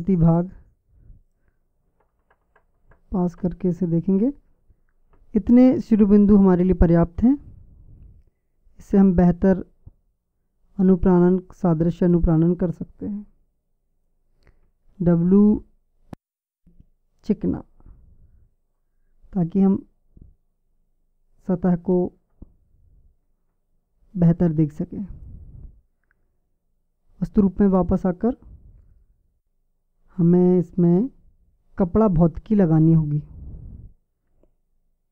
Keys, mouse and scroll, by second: 2.2 KP_Add, 6.1 middle click, 7.0 middle click, 14.9 w, 23.6 Tab, 30.2-35.1 drag.